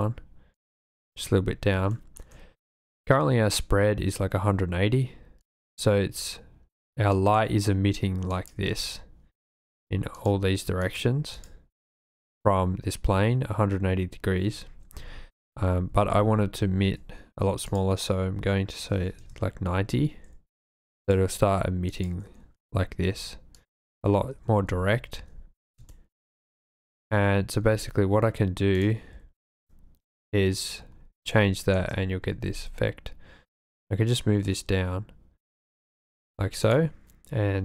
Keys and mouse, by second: 0.6 click, 1.9 shift+middle click, 5.4 click, 7.1 click, 8.4 click, 9.6 click, 10.1 click, 10.8 click, 11.4 click, 12.1 click, 15.0 super+z, 15.1 super+z, 15.5 super+z, 15.6 super+z, 15.9 super+z, 16.2 super+z, 16.6 super+z, 17.7-19.2 drag, 21.0 click, 21.9 click, 23.6 click, 24.5 super+z, 24.6 super+z, 24.9 super+z, 25.9 shift+click, 26.7 shift+click, 27.6 v, 30.1 click, 31.4-31.9 shift+drag, 32.3 g, 32.4 z.